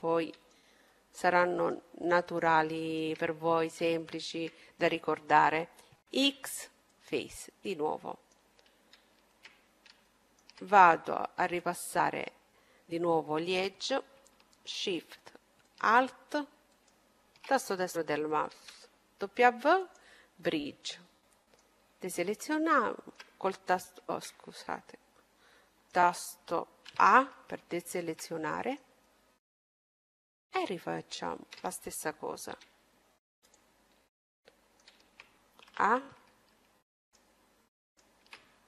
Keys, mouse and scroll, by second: 0.8 right click, 1.6-5.3 middle drag, 1.6-4.1 right drag, 5.4 x, 6.9-11.4 middle drag, 11.3-13.0 drag, 15.6-18.1 right drag, 18.3 w, 20.2-24.2 middle drag, 24.6-26.3 middle drag, 26.6 a, 27.6-29.5 right drag, 28.1-29.1 middle drag, 29.2-31.5 middle drag, 31.0-32.8 right drag, 32.4 w, 33.8 middle click, 34.2-36.0 middle drag, 35.6 a, 36.8-38.6 right drag.